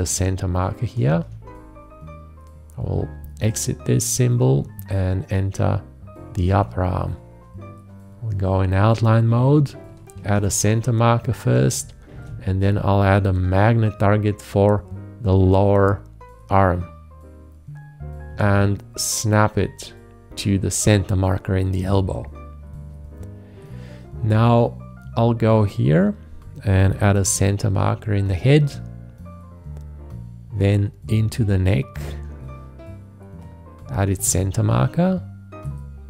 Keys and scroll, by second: 1.1 alt+`, 10.2 alt+`, 12.1 shift+`, 18.3 `, 27.1 alt+`, 34.1 alt+`.